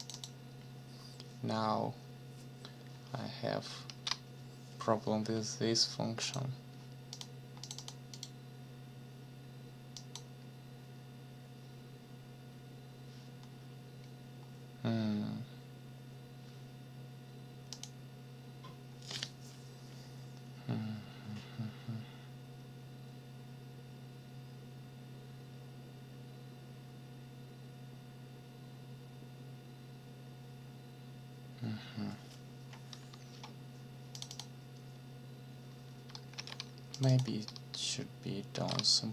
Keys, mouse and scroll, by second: 0.0 click, 3.9 ctrl+s, 6.2 click, 7.1 click, 7.6 click, 8.1 click, 10.0 click, 17.7 click, 34.1 click, 36.3 ctrl+c, 36.9 ctrl+click, 38.5 ctrl+v.